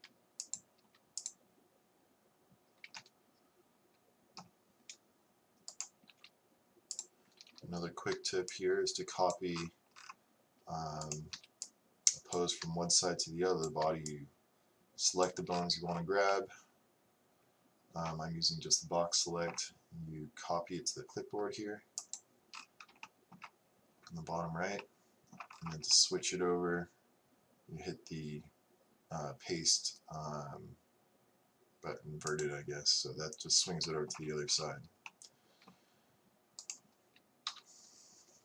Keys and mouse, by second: 0.0 r, 6.1-8.4 right drag, 6.1 g, 11.1-12.8 right drag, 11.4 b, 14.1 b, 23.1-24.9 drag, 25.0 middle click, 32.5-33.9 drag, 34.9 middle click, 36.6 right click, 37.5 KP_3.